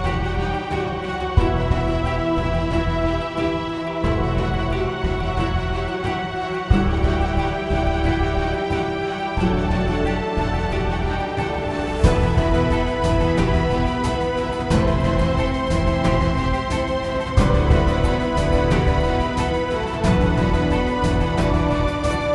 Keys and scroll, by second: 0.4-2.1 typing, 7.8 3, 8.0 Return, 8.9 s, 11.5-17.0 typing.